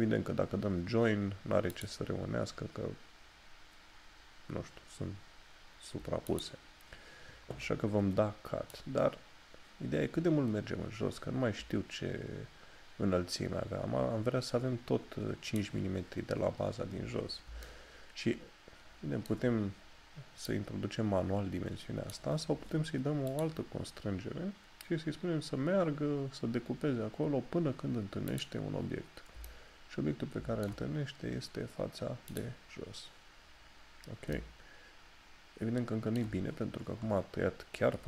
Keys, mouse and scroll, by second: 1.8 click, 6.4 click, 8.8 click, 17.7 shift+middle click, 28.4 click, 29.5 shift+middle click, 34.4 shift+middle click.